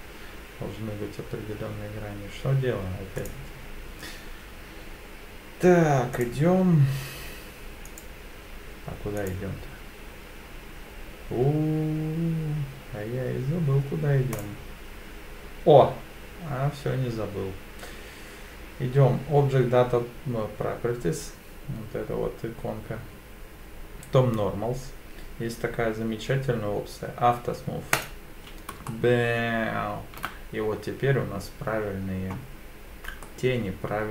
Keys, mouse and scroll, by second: 3.2 click, 6.2 click, 7.9 click, 9.2 click, 14.3 click, 28.0 click, 28.9-30.2 shift+middle drag, 33.2-34.1 middle drag.